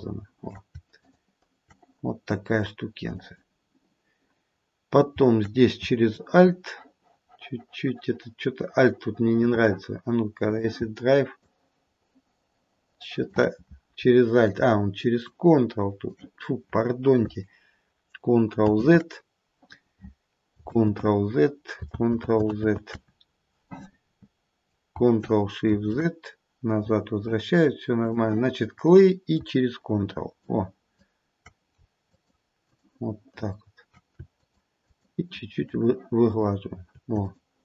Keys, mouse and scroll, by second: 1.0 shift+click, 3.1 click, 10.5 click, 11.3 alt+click, 15.2 ctrl+click, 18.9 ctrl+z, 18.9 ctrl+click, 20.5 ctrl+click, 22.2 ctrl+z, 22.7 ctrl+z, 25.9 ctrl+shift+z, 28.1 click, 30.4 ctrl+click, 32.1 ctrl+click, 32.7 ctrl+click, 33.3 ctrl+click, 34.4 shift+click, 34.9 shift+click, 35.2 shift+click, 35.5 shift+click, 36.4 shift+click, 37.3 shift+click.